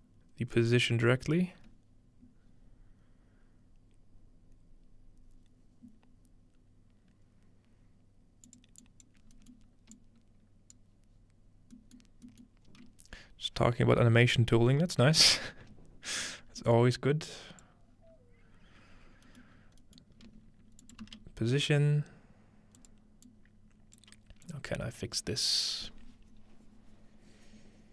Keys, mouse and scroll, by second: 0.6-2.5 drag, 8.5-12.5 drag, 9.2-10.8 scroll up 2, 10.0-11.6 middle drag, 10.8-11.6 scroll up 1, 11.8-14.0 middle drag, 16.3-16.8 scroll up 2, 16.8-17.9 middle drag, 17.3-17.9 drag, 17.9-19.6 scroll down 3, 19.6 scroll up 2, 19.7 scroll down 2, 19.8 scroll up 2, 20.1-20.8 scroll down 2, 20.8-27.6 shift+drag, 20.8 shift+middle click, 21.0 shift+d.